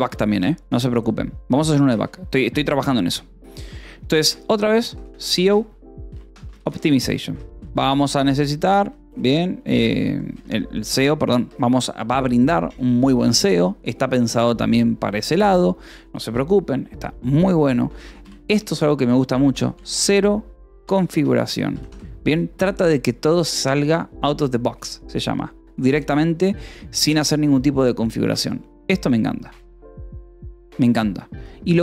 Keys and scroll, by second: 0.0-0.8 typing, 1.8 :, 2.9 space, 5.3-8.7 typing, 8.5 ctrl+s, 10.1 e, 10.3 space, 11.3 Escape, 15.3 a, 17.6-21.6 typing, 22.4 ctrl+s.